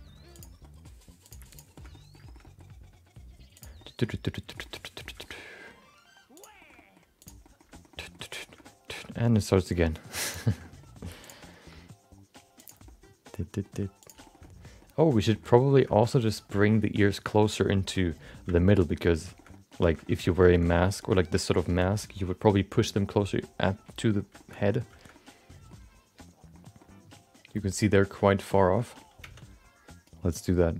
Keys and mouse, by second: 0.7 middle click, 1.2 click, 1.5 click, 1.7 middle click, 1.9 middle click, 2.2 shift+middle click, 2.4 middle click, 2.7 g, 3.8 middle click, 4.6 middle click, 4.8 middle click, 5.4 middle click, 6.3 click, 6.6 shift+middle click, 6.7 middle click, 7.2 click, 7.4 middle click, 7.7 shift+middle click, 7.9 middle click, 8.4 shift+middle click, 8.5 middle click, 9.0 g, 10.7 middle click, 11.2 click, 11.4 middle click, 11.7 g, 12.9 middle click, 14.0 click, 14.2 shift+middle click, 14.4 middle click, 15.3 shift+middle click, 15.4 middle click, 15.9 shift+middle click, 18.5 shift+middle click, 18.7 middle click, 19.3 shift+middle click, 19.5 middle click, 19.8 shift+middle click, 20.0 middle click, 20.5 shift+middle click, 20.6 middle click, 21.0 shift+middle click, 24.0 middle click, 24.3 shift+middle click, 25.1 middle click, 26.2 middle click, 26.8-28.5 middle drag, 28.6 shift+middle click, 28.8 middle click, 29.5 Tab.